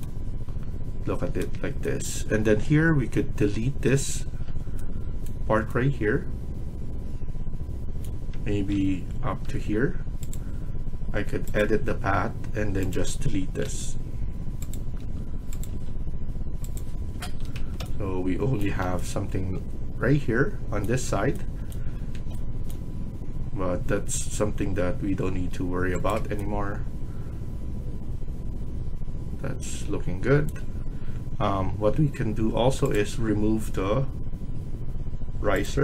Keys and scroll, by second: 3.7 Delete, 8.6 ctrl+z, 13.6 Delete, 14.9 Delete, 15.6 Delete, 17.4 Escape, 21.9 Escape, 31.6 Escape.